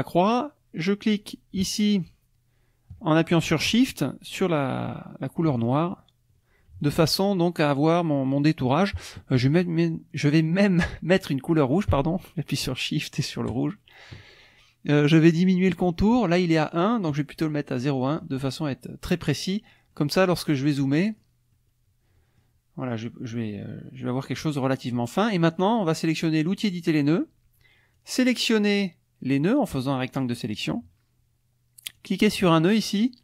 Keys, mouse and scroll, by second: 5.6 shift+click, 13.5 shift+click, 17.1 right click, 17.9 click, 19.7-20.7 drag, 21.1 click, 21.5-22.6 drag, 26.7 click, 27.9-30.4 drag, 32.0-33.2 drag.